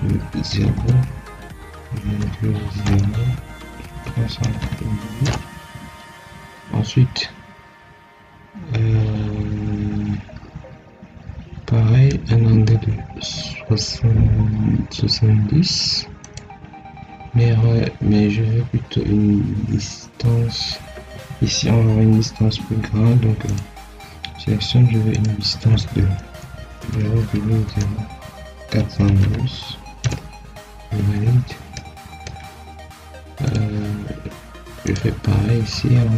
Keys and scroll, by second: 0.6 0, 1.9 ., 2.7 0, 5.1 Return, 17.5 Escape, 26.7 0, 27.1 ., 27.6 0, 29.9 Return.